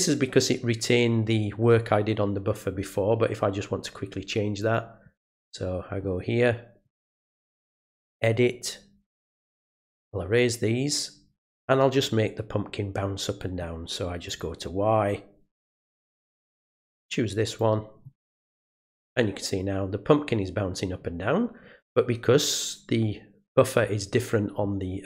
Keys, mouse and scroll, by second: 4.6 click, 6.8 right click, 8.0 click, 9.5 click, 10.0 click, 14.3 click, 15.5 click, 17.4 click, 18.8 click.